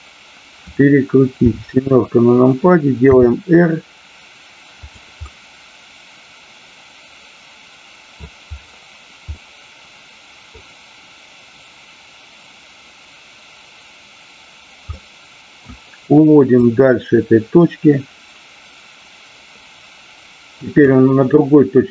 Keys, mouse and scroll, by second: 1.4 KP_7, 3.0 r, 5.3-8.2 middle drag, 9.4-10.5 middle drag, 14.9-15.5 middle drag, 16.5-20.9 drag.